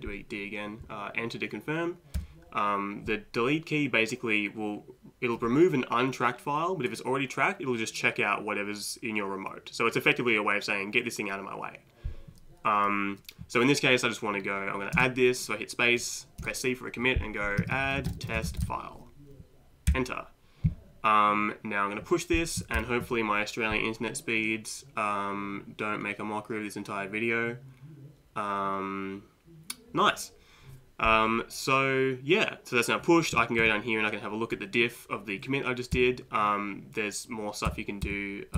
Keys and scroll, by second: 2.2 Return, 15.0 space, 16.4-20.4 typing, 22.8 shift+p, 33.3 Right, 33.6 Right, 35.9 Down, 37.7 Down, 38.0 Down.